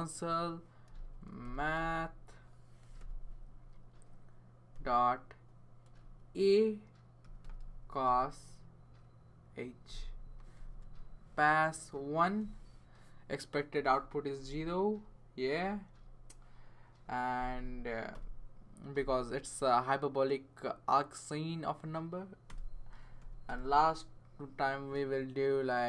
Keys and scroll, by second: 0.5-3.4 typing, 4.7 ., 6.0-8.5 typing, 10.5 shift+9, 12.4 1, 17.2 Tab, 17.3 Tab, 17.6 Tab, 18.1 Return, 22.5 Return, 23.2 typing.